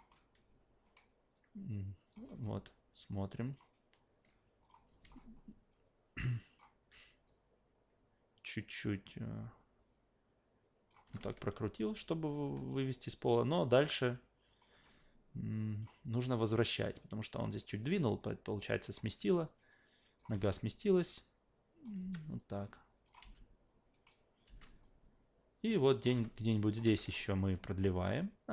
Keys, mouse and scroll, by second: 1.3-2.1 drag, 2.4-3.6 alt+drag, 4.6 click, 5.2 alt+middle drag, 5.7-6.6 alt+drag, 7.2 click, 11.0 s, 11.3-12.4 alt+drag, 13.4-14.6 drag, 14.9-15.8 alt+drag, 16.5 click, 17.7-18.6 alt+drag, 19.5 click, 20.3 w, 21.0 click, 22.0 s, 23.0 click, 23.2 alt+v, 24.4 alt+v, 24.8-26.0 drag, 26.1 s, 26.9 a, 27.2 alt+middle click, 28.3-28.5 drag.